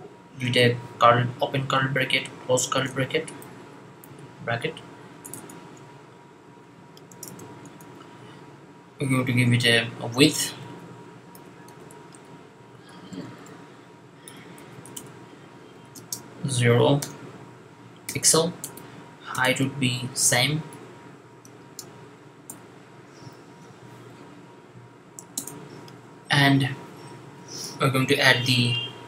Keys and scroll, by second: 1.3 shift+[, 2.6 shift+], 4.2 Left, 5.7 Left, 6.3 Up, 7.0 Tab, 7.2 Tab, 7.5 Tab, 10.2-16.8 typing, 17.8 typing, 19.0-22.2 typing, 23.9 ;, 27.9 typing.